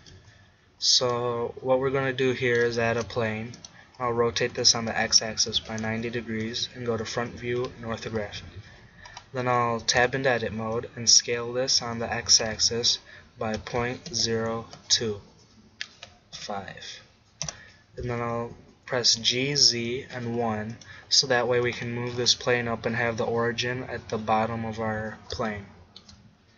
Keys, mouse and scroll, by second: 0.0 Escape, 2.9 shift+a, 4.5 r, 7.0 KP_1, 7.3 KP_5, 8.3-10.0 middle drag, 10.0 Tab, 10.8 click, 11.2 s, 19.1 g, 20.9-22.7 drag, 22.7-25.8 middle drag.